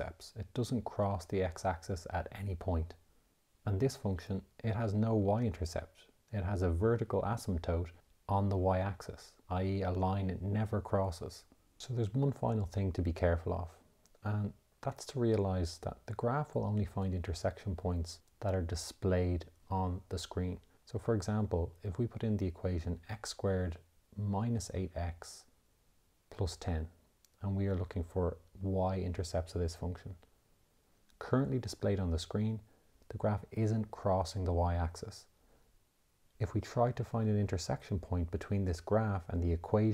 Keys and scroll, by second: 15.0 x, 22.3 -, 23.7 8, 25.4 x, 28.0 1, 28.9 0, 30.1 Return.